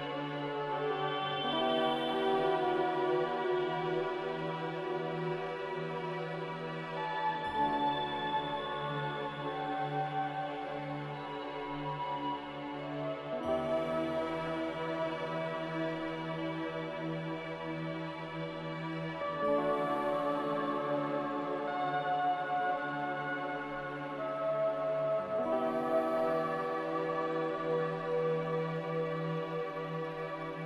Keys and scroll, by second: 11.9 z, 20.5-22.5 typing, 23.7 Tab, 23.7 Return, 26.2 a, 27.5-29.0 typing.